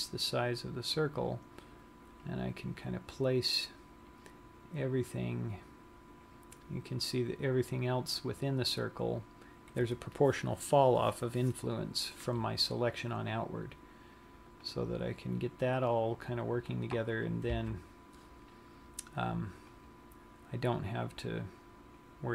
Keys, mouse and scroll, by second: 15.4 click, 17.9 a, 20.2 click.